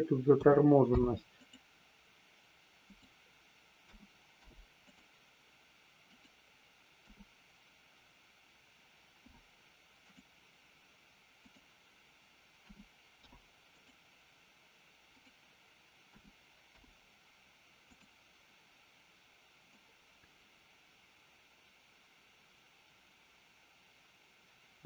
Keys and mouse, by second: 0.7 i, 2.9 click, 3.7 a, 4.3 i, 6.1 click, 6.9 a, 9.1 i, 11.4 click, 13.1 i, 15.1 click, 16.6 i, 19.7-24.8 drag.